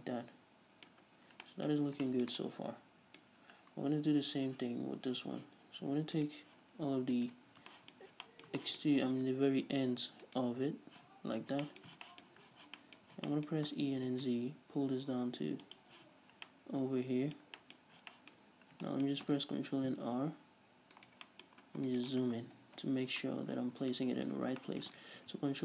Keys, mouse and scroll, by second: 0.9-2.1 scroll up 4, 3.4-4.0 scroll up 2, 4.0 Tab, 6.2-7.5 alt+right drag, 7.5 scroll down 2, 7.7-10.3 shift+middle drag, 8.0 scroll up 2, 8.8-9.7 scroll up 2, 9.7-10.3 scroll up 1, 10.3 alt+shift+right click, 11.0 z, 11.4 scroll down 2, 11.7-17.6 shift+middle drag, 12.5 z, 13.0 scroll up 2, 13.9 e, 15.8 shift+click, 16.0 z, 17.8-18.1 scroll up 1, 18.5-18.9 scroll up 1, 18.9 shift+middle click, 19.6 ctrl+r, 21.1 right click, 21.3-22.6 middle drag, 22.6 KP_Decimal, 23.4-24.0 scroll down 1, 24.0-25.6 middle drag, 25.2 ctrl+r.